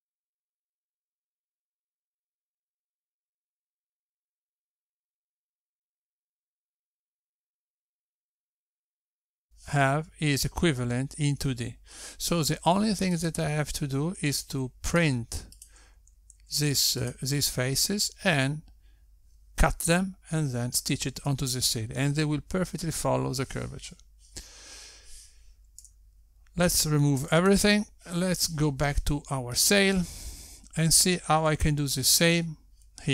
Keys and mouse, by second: 0.1 l, 0.9 l, 1.8 click, 2.8 click, 3.1 l, 3.8 click, 4.3 click, 4.6 l, 5.2 l, 5.9 click, 6.5 click, 6.8 l, 7.5 click, 9.1 Tab, 15.5 click, 16.6 g, 18.2 click, 18.7 g, 28.2 a, 29.6 x, 32.1 click.